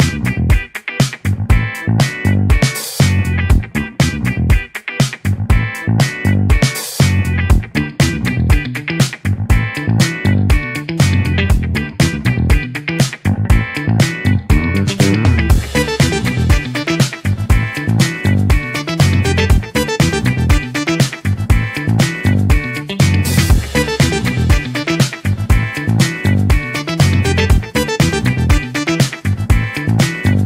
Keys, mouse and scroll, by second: 0.8-2.1 scroll down 1, 2.1-2.8 scroll up 2, 2.8-3.4 scroll up 1, 3.4-5.2 scroll up 1, 7.0-8.9 drag, 8.9-14.1 middle drag, 14.1 click, 15.3-18.4 middle drag, 18.4 click, 27.1 click.